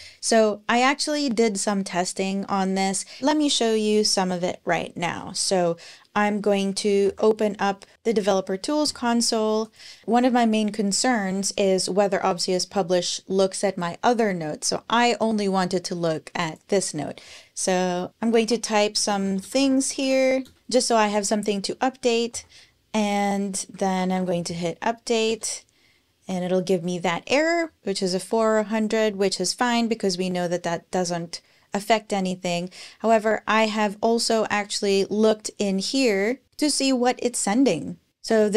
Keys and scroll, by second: 6.8 alt+super+i, 17.8-21.0 typing, 22.1 super+p, 23.3-24.5 typing, 25.1 Return.